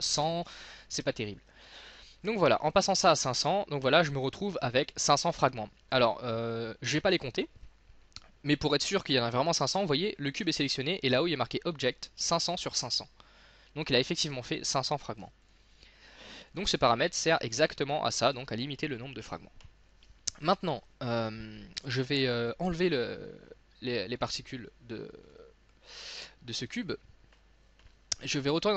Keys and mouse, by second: 2.3-4.8 drag, 5.4-6.6 middle drag, 7.3-12.4 middle drag, 15.3 x, 16.5-17.9 drag, 17.9 middle click, 18.4-23.1 drag, 25.3-27.9 drag.